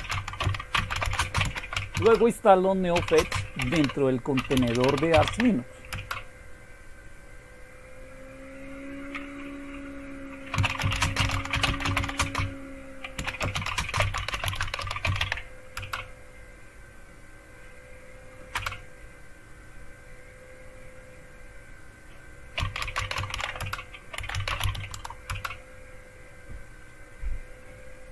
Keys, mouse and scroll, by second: 0.0-1.9 typing, 3.0-5.7 typing, 5.9 Return, 8.0 typing, 10.3-16.2 typing, 18.5 Return, 22.3-25.1 typing, 25.3 Return.